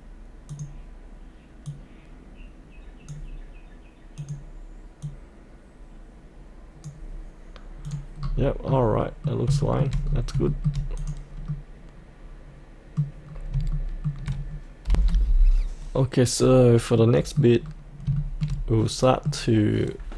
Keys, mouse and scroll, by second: 0.5-6.9 drag, 8.1-8.5 scroll up 1, 9.0 middle click, 9.3 scroll up 1, 9.8 shift+middle click, 10.0 scroll up 1, 10.4 shift+middle click, 11.0 click, 11.5 middle click, 13.3 scroll down 1, 13.7 shift+middle click, 14.9 F8, 16.3-17.0 scroll up 1, 17.0 middle click, 17.5-18.1 scroll down 1, 18.1-20.0 shift+middle drag, 20.0 middle click.